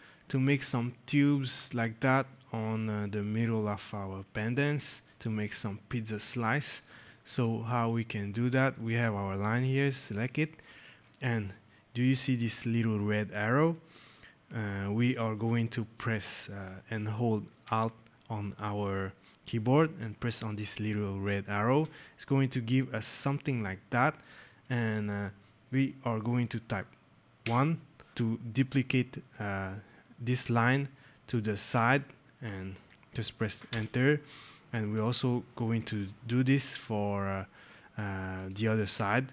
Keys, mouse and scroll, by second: 3.8 right click, 4.4 right click, 5.2 click, 5.8 right click, 6.6 right click, 7.2 click, 7.7 right click, 9.9 click, 20.3 alt+click, 27.3 KP_1, 33.6 Return, 34.8 click, 36.3 scroll, 38.2 scroll, 38.3 click.